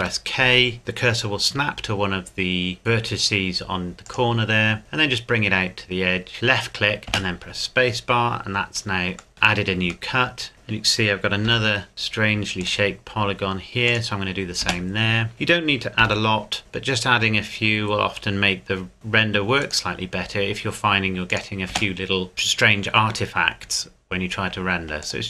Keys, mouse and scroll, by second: 0.0 k, 4.1 click, 7.1 space, 9.9 shift+middle click, 10.5 shift+scroll up 1, 11.5 k, 12.6 click, 14.6 space, 15.3 shift+middle click, 16.0 k, 19.6 click, 21.7 space, 22.3 click, 25.0 click.